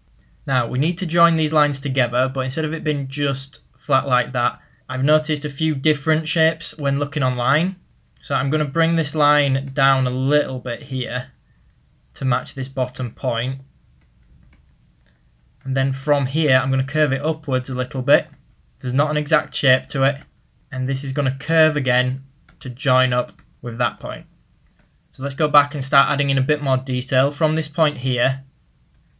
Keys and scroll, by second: 3.5 ctrl+z, 12.1 ctrl+z, 24.7-25.5 typing, 27.7 ctrl+z.